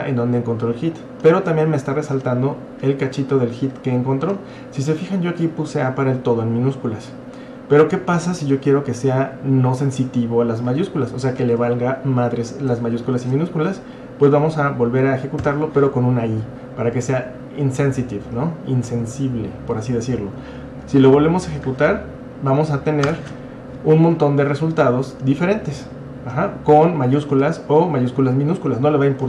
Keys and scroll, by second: 13.0 Up, 15.4 typing, 23.1 Return.